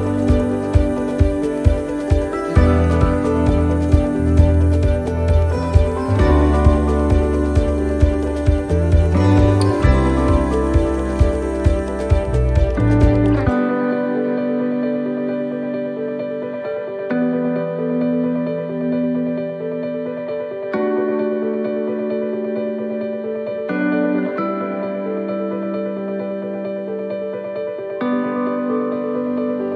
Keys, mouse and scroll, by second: 0.2 shift+middle click, 1.0 shift+middle click, 1.0-1.7 shift+scroll up 1, 1.7-2.0 scroll up 1, 2.1 middle click, 3.5 shift+middle click, 4.0 scroll up 1, 4.8 middle click, 6.0 middle click, 6.1 shift+middle click, 6.7 shift+middle click, 6.8 shift+middle click, 7.3-7.7 scroll down 1, 7.7 middle click, 8.3-8.6 scroll down 1, 8.7 shift+middle click, 9.6-9.9 scroll up 1, 10.8 shift+middle click, 15.2 middle click, 15.8 shift+middle click, 16.7 scroll up 1, 17.9 right click, 18.5 alt+shift+right click, 20.8 alt+shift+right click, 21.5 alt+shift+right click, 21.5 shift+middle click, 23.3 alt+shift+right click, 24.9 c.